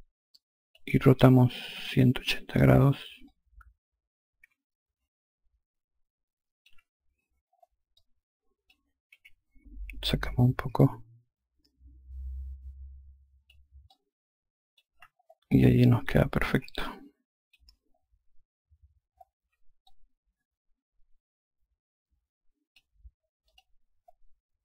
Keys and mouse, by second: 1.6 r, 3.1 click, 7.8 alt+click, 9.0 e, 10.7 click, 13.7 alt+click, 16.3 alt+click, 19.7 alt+click, 23.3 click.